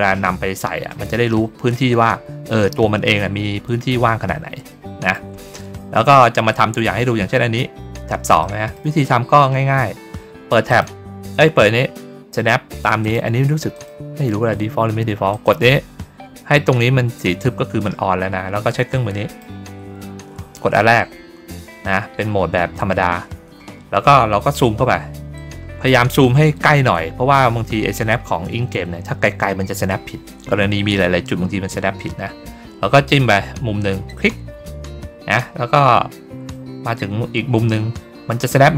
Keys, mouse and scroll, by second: 4.6 middle click, 5.9 ctrl+middle click, 6.8 ctrl+middle click, 8.3 middle click, 8.9 ctrl+middle click, 10.6 click, 12.9 click, 13.6 click, 15.2 click, 19.2 click, 24.6 ctrl+middle click, 25.2 middle click, 34.0 click.